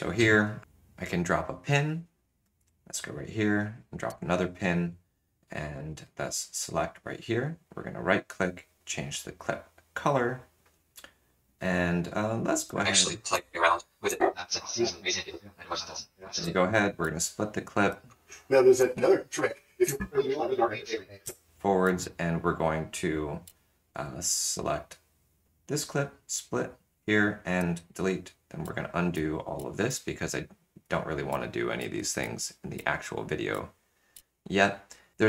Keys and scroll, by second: 0.6 m, 4.1 m, 12.7 space, 13.3 l, 14.0 l, 16.4 space, 17.0 ctrl+alt+shift+\, 17.8 space, 18.8 l, 19.8 l, 21.3 space, 21.8 ctrl+[, 21.8 ctrl+Down, 23.4 ctrl+[, 24.7 ctrl+Down, 26.3 ctrl+alt+shift+\, 27.6 shift+BackSpace, 28.6 ctrl+z, 29.1 ctrl+z, 29.5 ctrl+z, 29.8 ctrl+z, 31.8 ctrl+z, 32.2 ctrl+z, 32.7 ctrl+z, 34.1 ctrl+z.